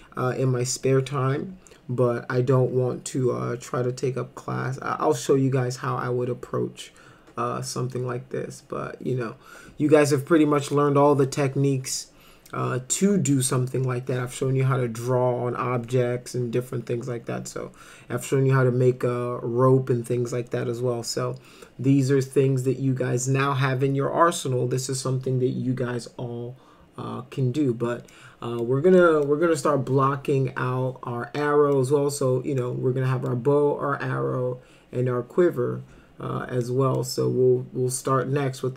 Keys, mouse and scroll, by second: 28.1 middle click, 29.0 middle click, 31.4 middle click, 32.6 middle click, 36.6 middle click.